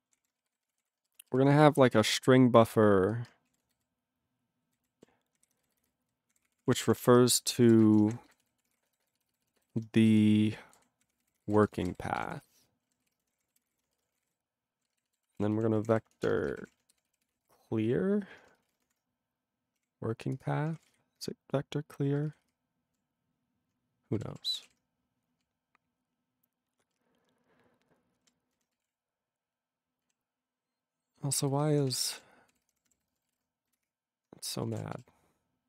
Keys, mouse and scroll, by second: 0.1 ctrl+o, 0.2-3.1 typing, 3.5 ctrl+a, 3.8 alt+n, 4.7 alt+n, 5.4 ctrl+o, 5.4 ctrl+n, 5.6 ctrl+n, 5.7 ctrl+n, 5.9 ctrl+n, 6.0 ctrl+n, 6.3 ctrl+o, 6.4 ctrl+p, 6.5 ctrl+e, 6.6 ctrl+p, 6.8 ctrl+e, 6.8 ctrl+p, 7.0 ctrl+e, 7.4-8.8 typing, 9.0 ctrl+b, 9.1 ctrl+b, 9.3 ctrl+b, 9.4 ctrl+b, 9.7 ctrl+b, 10.1-19.8 typing, 15.0 alt+b, 18.7 ctrl+space, 20.4 Return, 20.9 ctrl+p, 22.4 alt+f, 23.0 alt+f, 24.1 ctrl+n, 24.3 ctrl+e, 24.8 ctrl+s, 28.2 ctrl+p, 28.5 ctrl+n, 28.6-30.2 typing, 31.6 ctrl+BackSpace, 31.9 ctrl+s, 33.9 ctrl+n, 34.1 ctrl+Return, 34.5-35.6 typing.